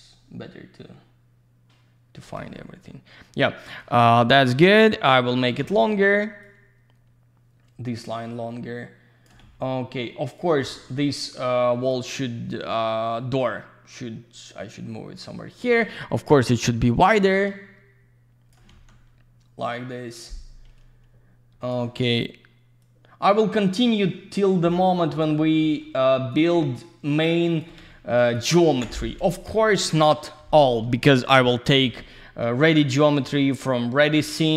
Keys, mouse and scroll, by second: 2.5 alt+middle click, 5.0 click, 6.4 click, 10.2 click, 11.8 typing, 13.1 click, 17.2 click, 19.7 click, 22.8 click, 26.3 click, 28.2 click, 28.7 End, 29.3 click, 30.4 /, 31.6 click, 33.2 alt+middle click.